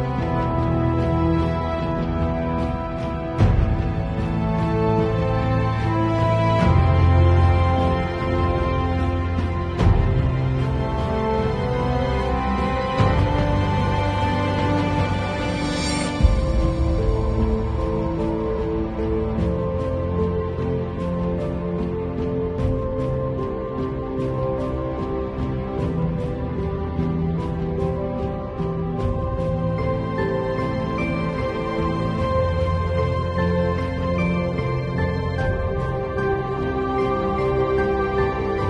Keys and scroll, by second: 0.0 [, 1.2-3.8 typing, 6.1 super+z, 6.4 super+v, 7.1 space, 24.7 super+i, 25.8 b, 35.0 super+z.